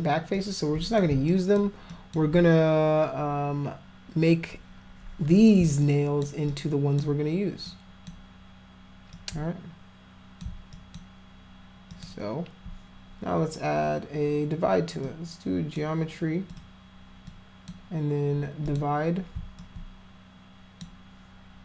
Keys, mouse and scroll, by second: 0.4 click, 1.3 alt+click, 2.0 alt+click, 5.8 alt+click, 6.5 alt+click, 7.7 alt+click, 9.2-10.4 alt+drag, 10.8 alt+click, 11.9 alt+click, 15.1 click, 16.5 click, 17.3 click, 18.7 click, 19.6-20.8 alt+drag.